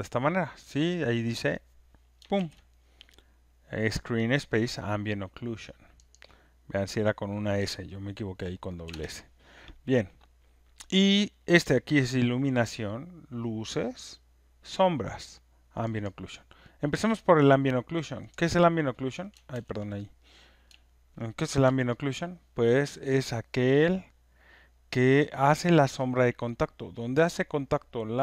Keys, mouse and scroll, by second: 2.3 ctrl+F1, 3.0 scroll, 4.0 scroll, 6.1 click, 7.5 middle click, 8.8 ctrl+F1, 9.1 ctrl+F1, 10.2-11.3 drag, 16.0 click, 17.0 middle click, 17.5 middle click, 18.9 middle click, 19.5 ctrl+z, 23.4 scroll, 24.7 alt+click, 25.6 alt+right click, 25.9 alt+middle click, 27.5 alt+scroll.